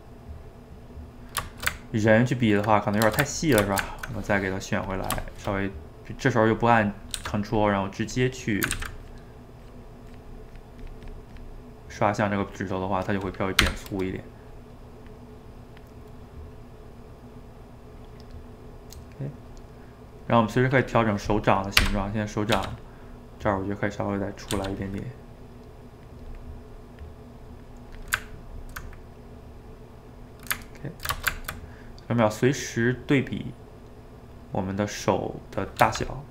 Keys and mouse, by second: 4.9 click, 5.3-7.1 shift+middle drag, 7.1 f, 8.0 click, 8.8 ctrl+z, 9.1-11.7 drag, 11.7-13.6 middle drag, 13.6 g, 13.9 middle click, 14.5-16.0 drag, 16.0-18.0 middle drag, 18.0 click, 18.9-20.2 middle drag, 20.2-21.9 drag, 21.9 d, 22.5 f, 23.1-24.6 drag, 24.6 f, 25.7-28.2 drag, 28.2-32.8 ctrl+middle drag, 32.8 click, 33.1-34.3 middle drag, 34.3 click, 35.1 middle click, 35.8 f.